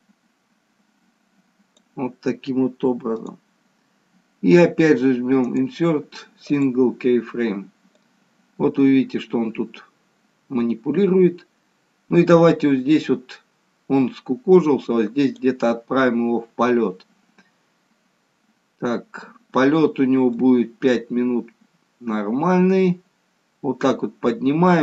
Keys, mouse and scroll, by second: 5.4 right click, 8.2 click, 18.2-18.7 scroll down 1, 18.9-19.5 scroll down 6, 20.3 click.